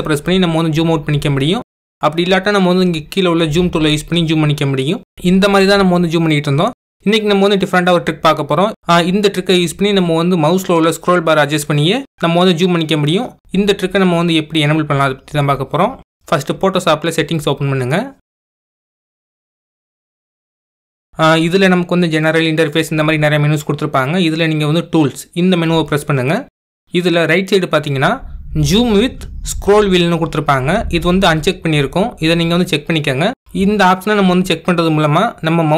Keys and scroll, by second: 0.4 super+-, 1.2 super+-, 2.4 super+-, 3.5 super+-.